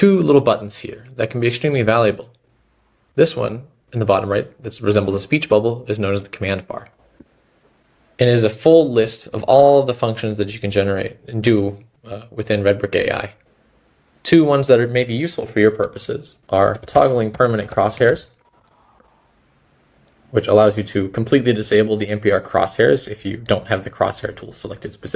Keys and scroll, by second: 7.5 s.